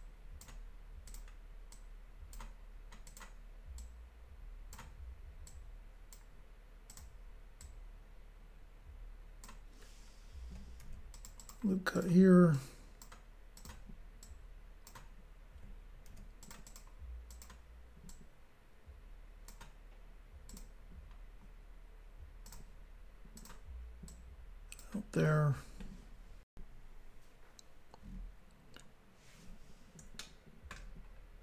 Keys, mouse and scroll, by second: 1.1 click, 1.1 click, 1.7 click, 3.0 click, 3.2 click, 3.8 click, 5.4 click, 6.9 click, 7.0 click, 7.6 click, 11.1 ctrl+r, 11.1 click, 11.3 click, 11.4 click, 11.5 double click, 11.9 double click, 12.0 double click, 12.5 double click, 13.6 click, 13.7 click, 14.2 click, 16.1 ctrl+r, 16.4 click, 16.5 click, 16.7 click, 16.8 double click, 17.3 double click, 17.5 double click, 18.1 double click, 20.5 click, 20.6 click, 22.5 click, 22.6 click, 23.4 click, 23.5 click, 24.1 click, 26.5 Pause, 28.8 scroll down 2, 30.2 shift+middle click, 31.1 scroll up 2.